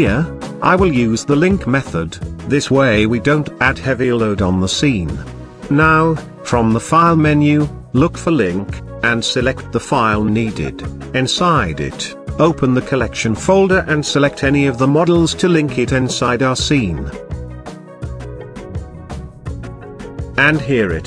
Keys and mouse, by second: 3.1-5.2 drag.